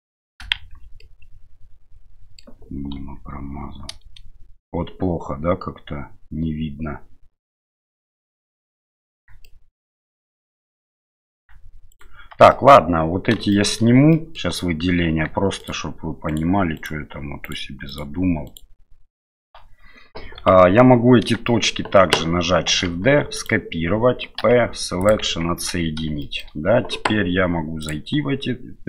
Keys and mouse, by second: 0.5 shift+z, 1.0-2.4 middle drag, 2.9 KP_7, 8.1-9.2 middle drag, 9.4 shift+middle click, 11.9 shift+right click, 12.5 middle click, 13.5 shift+middle click, 14.1 middle click, 15.6 shift+right click, 16.3 shift+right click, 16.7 shift+right click, 17.4 shift+right click, 18.5 shift+right click, 19.1 shift+right click, 20.5 KP_7, 21.4 shift+middle click, 22.7 shift+d, 24.4 p, 25.4 Tab, 26.2 shift+middle click.